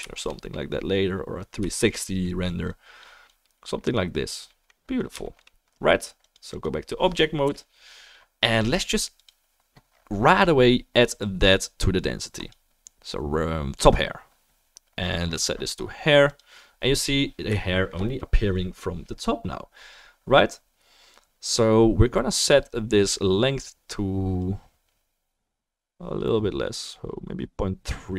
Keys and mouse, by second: 6.6-9.4 drag, 6.6-28.1 right drag, 7.4 KP_0, 12.3-16.4 drag, 24.4-28.1 drag.